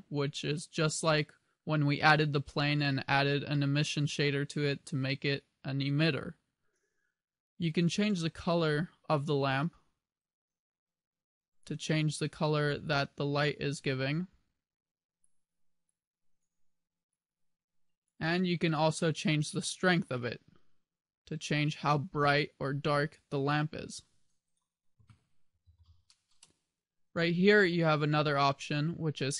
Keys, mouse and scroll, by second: 9.2 click, 10.3 click, 20.2 click, 24.4 click, 26.2 click.